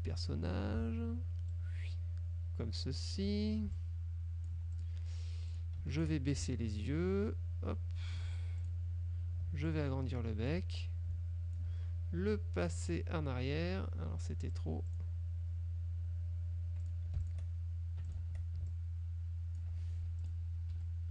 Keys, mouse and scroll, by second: 1.6-3.4 ctrl+drag, 3.8-5.1 ctrl+drag, 4.8-5.1 ctrl+scroll up 1, 5.6 click, 6.0 shift+click, 6.5-8.4 ctrl+shift+drag, 8.7 ctrl+click, 9.8-10.8 ctrl+drag, 10.9 ctrl+click, 13.0 click, 14.6 click, 15.0 click, 17.0 click, 17.4 shift+click, 18.2 shift+click, 18.3 shift+Caps_Lock, 18.8 ctrl+shift+click, 20.2 ctrl+F2, 20.3 click, 20.8 F1.